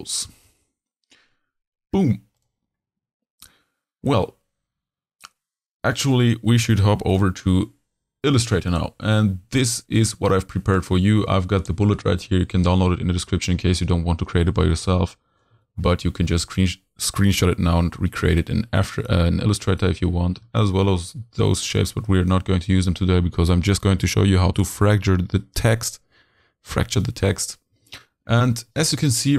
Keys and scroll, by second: 14.4 z, 15.5 h, 18.0 z, 19.1 h, 20.3 v, 21.7 h, 27.7 z, 28.6 h.